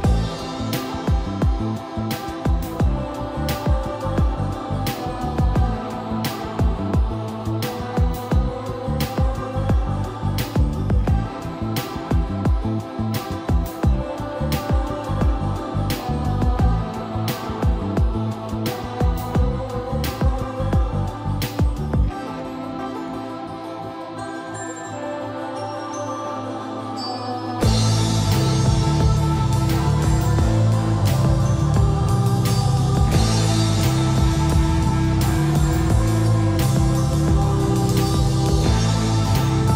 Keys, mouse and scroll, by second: 1.8 middle click, 2.8 click, 7.5-9.4 scroll up 1, 12.0 scroll down 1, 12.8 click, 13.9 c, 14.6 Escape, 15.0-17.6 typing, 17.9 click, 20.7-21.0 scroll down 1, 21.0-21.4 scroll up 1, 22.4 click, 26.7-27.3 scroll up 1, 27.3 m, 30.2 Escape, 31.2 middle click, 31.6 scroll up 1, 32.5 |, 34.0 scroll up 1, 35.2-36.4 typing, 36.5 click, 38.3-39.4 typing.